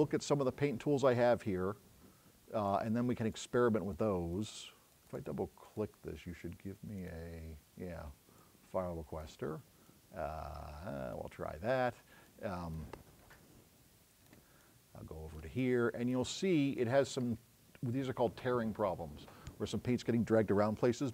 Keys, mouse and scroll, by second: 2.7 click, 4.4 middle click, 7.0 click, 8.5 click, 9.9-11.2 drag, 12.3 click.